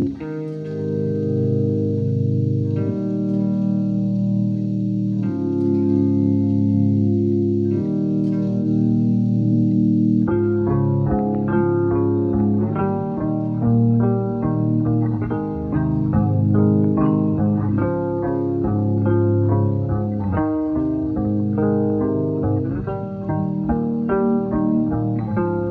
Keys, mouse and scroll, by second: 1.4-2.0 scroll up 2, 2.6 space, 2.7 click, 2.9 space, 3.4-3.7 alt+scroll up 1, 4.3 alt+click, 5.5 alt+click, 8.5 scroll down 1, 9.6 alt+click, 10.5 scroll down 1, 11.6 alt+click, 12.8-13.3 scroll down 1, 13.3 typing, 13.4 click, 14.5 click, 14.8 space, 15.2-15.6 alt+scroll down 3, 15.9-16.6 typing, 16.0 click, 16.6-17.0 alt+scroll up 1, 17.7 alt+click, 17.7 typing, 19.8 typing.